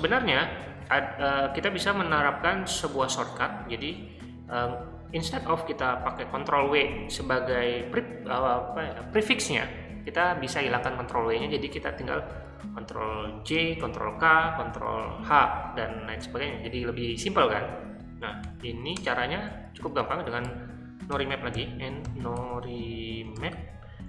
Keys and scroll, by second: 18.4 o, 19.0 Return, 20.5-24.0 typing.